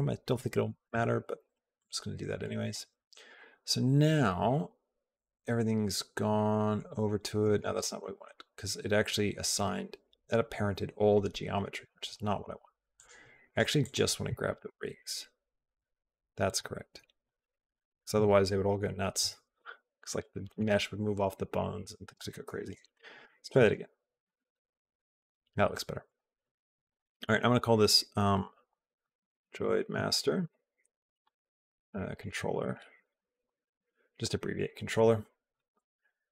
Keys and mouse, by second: 7.8 ctrl+z, 13.3 click, 13.6 click, 14.8 shift+click, 15.6 shift+click, 16.2 shift+click, 19.9 shift+click, 23.0 ctrl+p, 26.7 click, 27.2 shift+click, 32.7 shift+click.